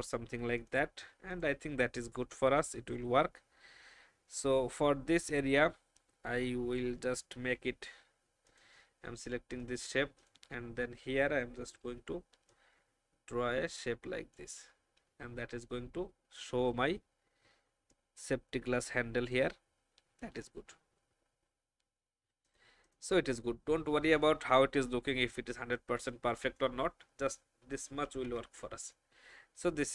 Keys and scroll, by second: 11.8 n, 21.3 alt+v, 28.1 ctrl+g.